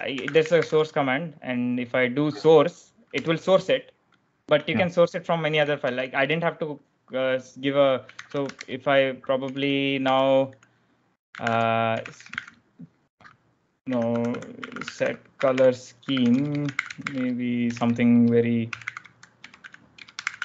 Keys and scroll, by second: 0.0-0.9 typing, 3.1 Return, 5.8-6.1 typing, 8.0-12.6 typing, 13.7-20.4 typing.